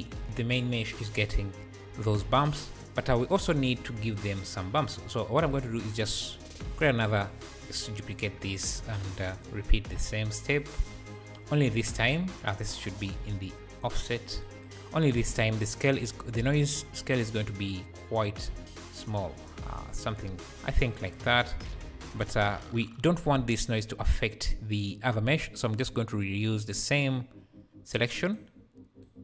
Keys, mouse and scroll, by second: 0.2-2.8 shift+drag, 1.6 `, 2.4 scroll down 1, 4.1 click, 4.6 click, 5.2-5.5 scroll down 1, 5.5-6.6 drag, 6.6 shift+d, 8.0-10.5 drag, 8.5-9.3 scroll up 1, 11.7-13.8 drag, 12.3-13.1 scroll up 2, 14.9-15.2 scroll up 2, 16.7-18.8 drag, 20.6 scroll down 1, 21.4 scroll down 2, 23.3 `, 26.2-28.3 drag, 29.0 click.